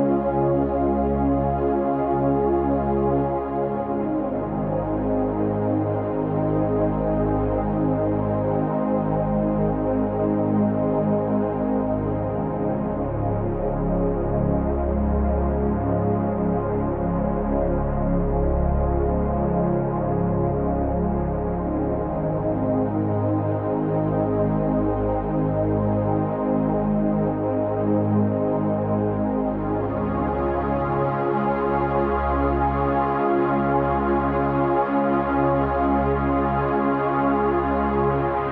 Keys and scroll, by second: 24.9 ctrl+j.